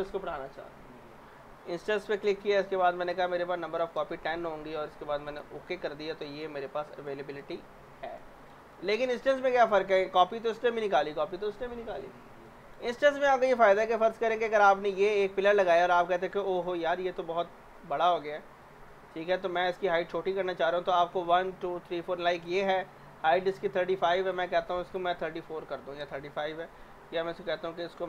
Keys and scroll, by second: 3.2-4.2 typing, 25.2-26.2 typing.